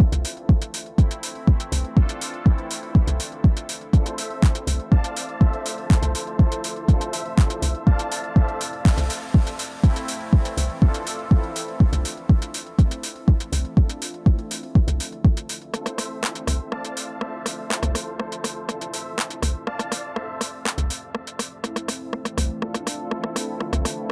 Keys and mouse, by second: 2.6 middle click, 3.7-5.5 drag, 5.5 middle click, 6.3 1, 7.4 2, 7.9 f, 8.2-9.6 drag, 8.7 3, 9.9 middle click, 11.2 f, 11.6-13.8 drag, 13.9-15.8 drag, 17.6 click, 18.6-21.4 drag, 21.4-24.1 middle drag.